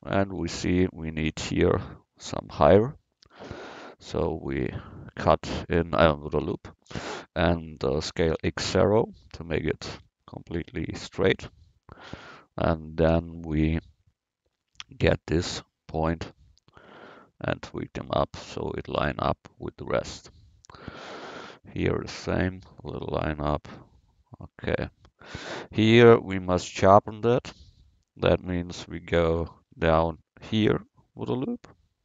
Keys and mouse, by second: 0.0 Tab, 0.4 Tab, 3.3 ctrl+r, 8.1 s, 10.7-12.4 drag, 13.1 a, 14.5 c, 16.5-18.1 drag, 20.0 c, 20.8 a, 21.0 c, 22.3 click, 24.8 a, 29.8 ctrl+r.